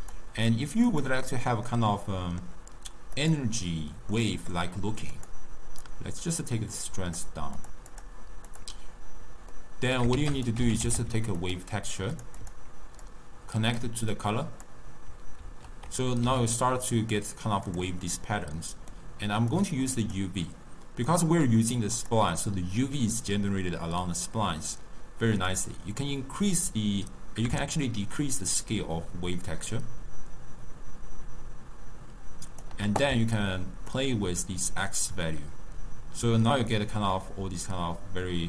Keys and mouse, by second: 0.1 click, 1.1 click, 1.7-3.5 middle drag, 3.5 click, 4.2-5.2 middle drag, 5.2-7.7 drag, 8.7 click, 12.6 click, 14.0-15.6 drag, 15.6 ctrl+t, 20.3 click, 21.2 click, 22.2 click, 25.6-28.6 drag, 34.1-37.0 shift+drag.